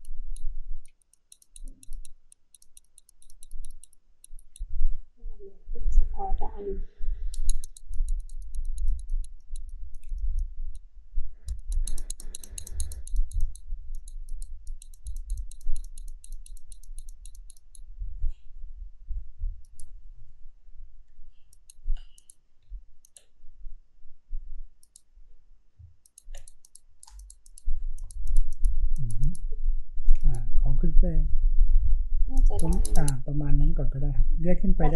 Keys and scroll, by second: 21.4 space.